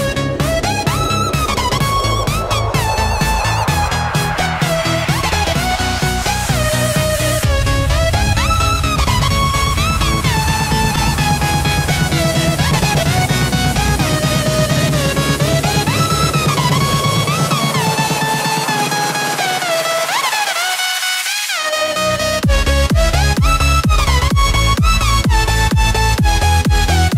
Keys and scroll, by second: 10.1 ctrl+g.